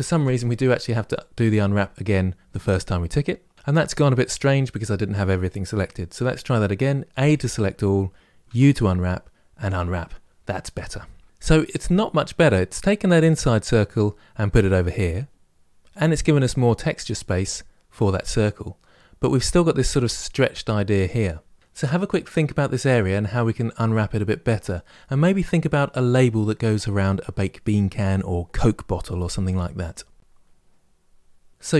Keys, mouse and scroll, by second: 2.6 u, 6.9 a, 9.4 u.